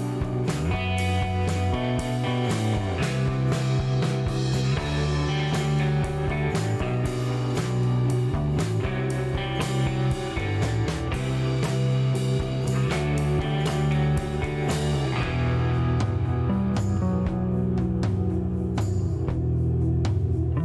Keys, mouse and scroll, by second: 1.2 click, 2.3 click, 3.8-4.6 typing, 5.3 click, 7.5 click, 9.3 click, 11.9-12.9 typing, 13.8 click, 14.3 click, 15.2 middle click, 16.0 shift+right click.